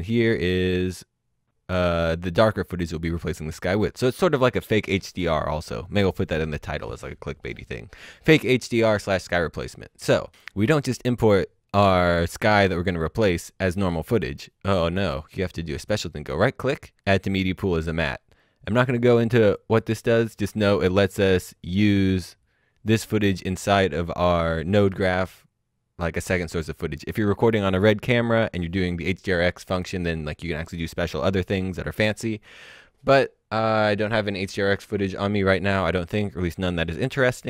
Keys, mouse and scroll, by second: 14.8 right click, 17.9 click, 19.5 click.